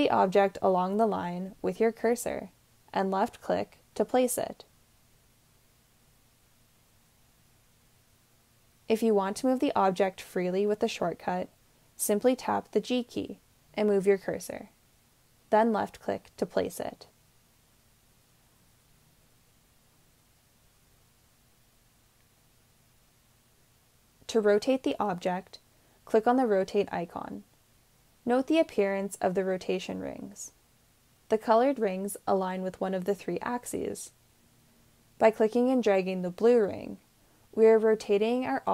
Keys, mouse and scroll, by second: 2.7 click, 11.8 g, 15.7-18.7 drag.